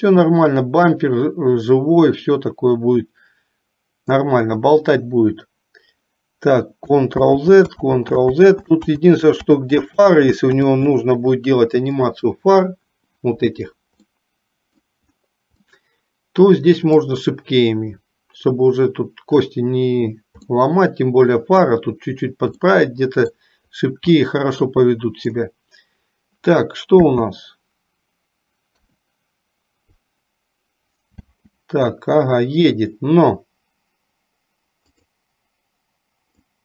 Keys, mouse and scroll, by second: 7.3 ctrl+z, 8.0 ctrl+z, 8.4 ctrl+z, 9.0 ctrl+z, 9.5 ctrl+z, 10.3 ctrl+z, 10.6 ctrl+z, 14.2 middle click, 15.9-17.3 middle drag, 20.6-21.8 middle drag, 22.8 middle click, 24.4 middle click, 27.0 space, 29.1 KP_3, 31.4 space, 35.0 click, 36.5-36.6 drag.